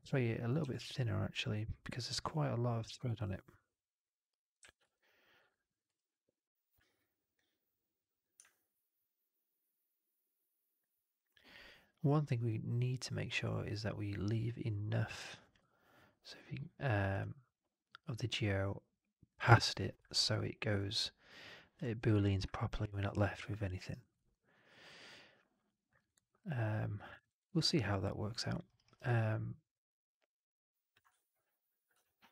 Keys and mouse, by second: 0.5 r, 2.6-4.4 middle drag, 4.5 w, 4.8 alt+click, 5.8 4, 7.2-15.5 drag, 17.0 click, 19.2 drag, 20.1-21.6 alt+drag, 22.5-23.5 alt+drag, 23.7 alt+right drag, 23.9 alt+right drag, 24.0-25.8 alt+drag, 25.8 alt+right drag, 26.0 alt+right drag, 26.2-26.8 alt+drag, 27.0 alt+right drag, 27.1 alt+right drag, 27.3-28.4 alt+drag, 28.5 alt+right click, 28.7 alt+right drag, 28.9-30.8 alt+drag, 31.0 1, 31.8 4, 32.2 alt+click.